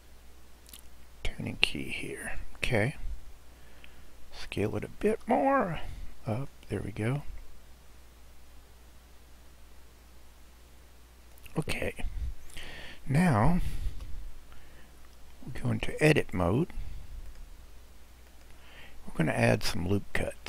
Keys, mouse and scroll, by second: 2.8 scroll, 5.1 s, 7.2 click, 14.0 KP_Decimal, 15.0 scroll down 1, 17.4-20.4 drag.